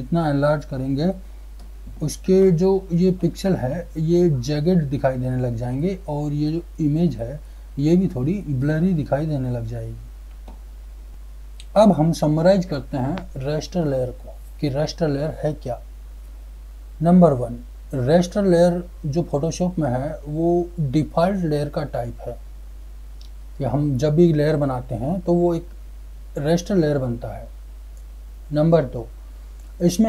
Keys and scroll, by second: 10.4 ctrl+z.